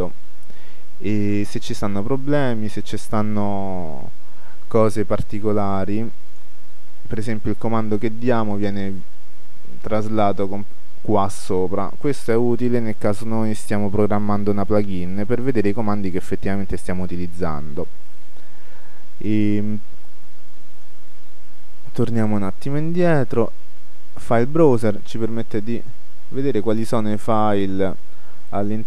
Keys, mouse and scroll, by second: 4.5 g, 6.5-8.1 drag, 13.8-15.2 drag, 19.3-21.0 drag, 22.3-24.1 drag.